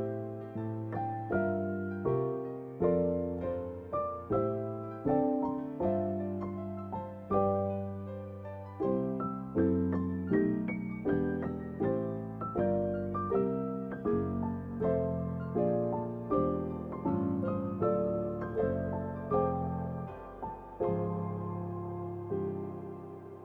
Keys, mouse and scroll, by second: 0.2 Tab, 1.6 ctrl+shift+click, 2.5 Tab, 3.1 r, 4.6 Tab, 5.9 click, 6.7 ctrl+shift+click, 7.6 Tab, 8.4 r, 9.7 Tab, 11.5 click, 12.1 ctrl+shift+click, 13.1 Tab, 13.8 r, 15.2 Tab, 16.4 ctrl+shift+click, 17.0 Tab, 17.5 r.